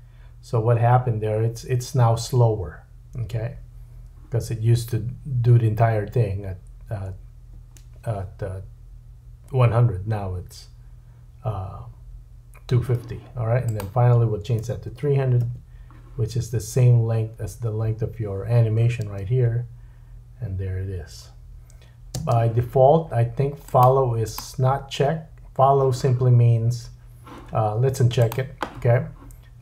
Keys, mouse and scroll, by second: 6.9 space, 15.0 KP_0, 19.0 space, 22.2 space, 23.8 middle click, 24.3 click, 24.4-28.2 middle drag, 28.2 click, 28.3-29.6 middle drag.